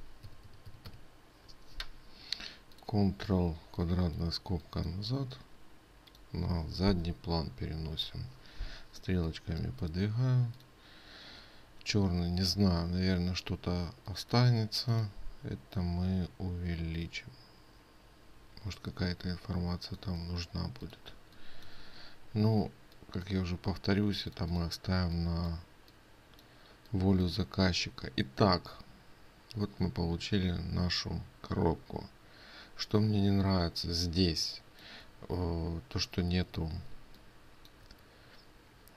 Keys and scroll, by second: 37.4 ctrl+space.